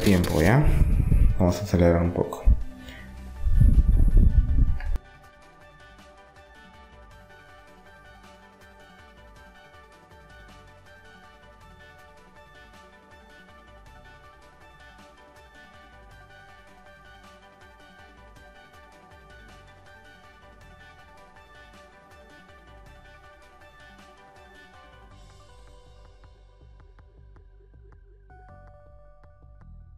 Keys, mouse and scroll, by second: 1.8 middle click, 2.1 e, 3.4-5.1 drag, 5.1 middle click, 5.9-7.0 middle drag, 7.0 click, 7.5 middle click, 8.2 click, 9.0 middle click, 10.2 click, 11.0 middle click, 12.1 middle click, 12.5 click, 14.0 middle click, 15.0 KP_1, 15.7 KP_2, 15.9 KP_3, 17.0 middle click, 17.8 click, 19.0 middle click, 20.6 KP_1, 21.2 ctrl+KP_1, 21.4 click, 21.6 middle click, 22.2 click, 23.1 e, 24.3 r, 24.9 click, 26.1 ctrl+r, 27.0 r, 27.7-28.9 right drag, 28.7 r.